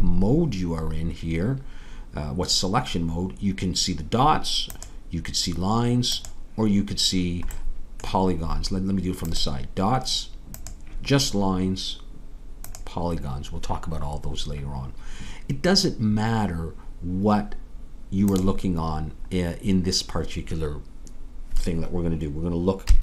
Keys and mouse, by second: 8.9-12.1 middle drag, 12.1-22.9 drag, 22.9 KP_1.